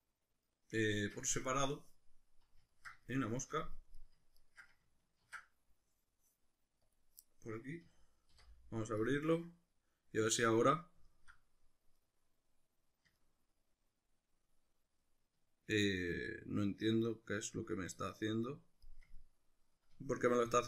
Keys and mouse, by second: 1.0 Escape, 1.4-2.0 middle drag, 2.7-4.0 ctrl+middle drag, 4.0 right click, 4.4 ctrl+right click, 5.2 ctrl+e, 7.5-9.6 middle drag, 7.8 a, 8.3 u, 10.7 middle click, 19.1-20.6 ctrl+middle drag.